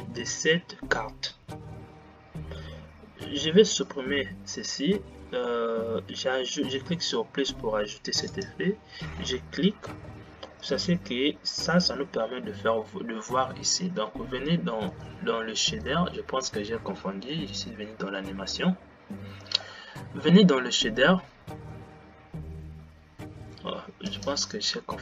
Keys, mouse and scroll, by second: 4.1 click, 7.2-11.2 drag.